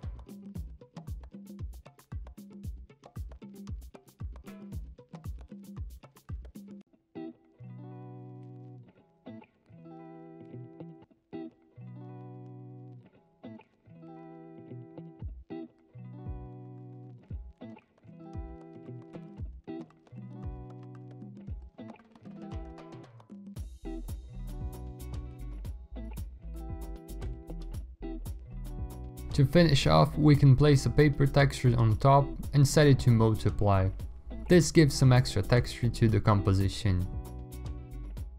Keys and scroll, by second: 0.0-0.2 typing, 1.2-3.9 typing, 3.2 Return, 3.5 Return, 8.4 ctrl+a, 8.4 typing, 9.9-14.1 typing, 15.2-18.7 typing, 16.5 ctrl+d, 17.0 ctrl+a, 21.6 t, 27.1 v, 32.4 alt+Tab.